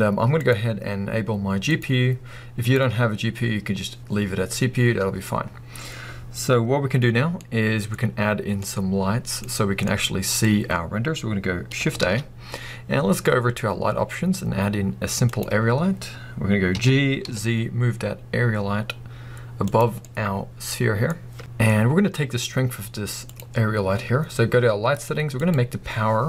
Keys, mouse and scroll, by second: 7.1 scroll down 1, 7.4-8.2 middle drag, 8.2 scroll down 1, 8.4-19.8 middle drag, 12.0 shift+a, 16.7 g, 19.8 click, 20.0-23.2 middle drag, 23.2 click, 25.4-26.2 drag.